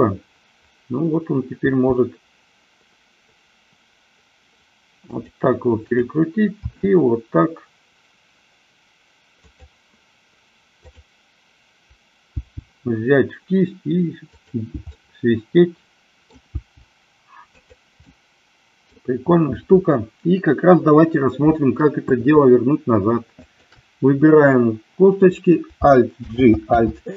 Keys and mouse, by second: 1.8 r, 5.9-7.4 drag, 7.6 r, 10.8-12.0 drag, 12.6 g, 14.5 click, 15.0-16.4 middle drag, 16.6 g, 18.1-18.7 middle drag, 26.3 alt+g, 26.9 alt+r.